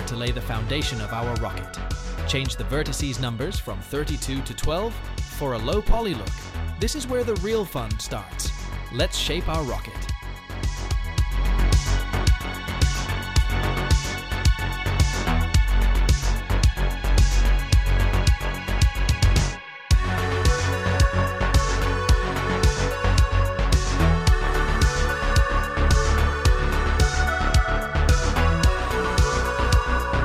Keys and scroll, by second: 6.3 r, 6.4 Tab, 6.6 r, 10.4 s, 15.7 g, 15.9 z, 19.6 g, 19.9 z, 23.0 e, 29.3 s.